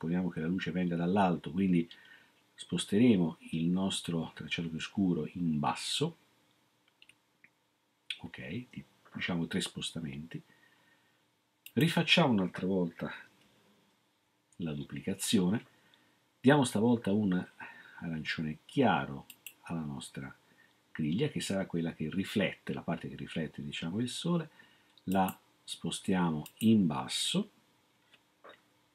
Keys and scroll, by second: 14.2 ctrl+d.